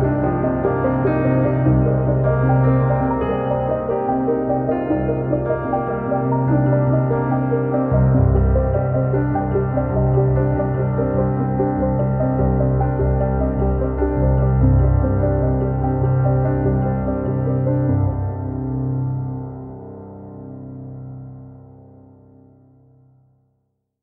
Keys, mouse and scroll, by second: 0.0 click, 1.2 click, 1.4 middle click, 1.6 click, 3.6 scroll down 2, 3.7 middle click, 3.9 scroll up 1, 4.0 click, 5.2 scroll down 2, 5.3 middle click, 5.5 middle click, 5.7 KP_1, 6.4 click, 6.5 scroll up 1, 6.6 middle click, 7.4 click, 8.3-8.9 middle drag, 9.4 click, 10.1 scroll up 2, 10.4 middle click, 11.0 click, 11.1 scroll up 2, 11.3 click, 12.5 scroll down 3, 12.6 scroll up 2, 12.8 click, 14.2 scroll down 3, 14.4 KP_1, 14.5 scroll up 1, 14.6 click, 15.2 scroll up 3, 15.4 click, 15.8 scroll down 2, 15.9 scroll up 1, 16.0 click, 16.5 scroll down 3, 16.8 click, 17.6 scroll up 3, 17.7 scroll down 3, 17.8 middle click, 18.7 KP_1, 19.1 scroll down 2, 19.3 scroll up 2, 19.7 click, 19.9 scroll down 1, 20.1-22.3 drag, 22.3-22.6 scroll up 5.